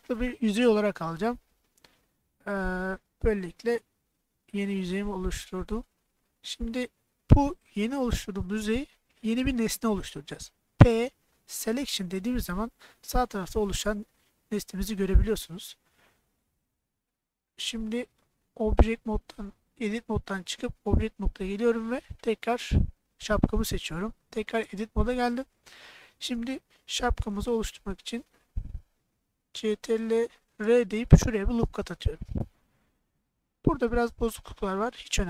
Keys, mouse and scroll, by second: 3.3 right click, 4.5-5.6 middle drag, 10.8 p, 18.7 middle click, 20.3 Tab, 20.9 click, 22.6 middle click, 24.7 Tab, 25.2 middle click, 26.1 middle click, 30.6 ctrl+r, 33.0 click, 34.7-35.2 middle drag.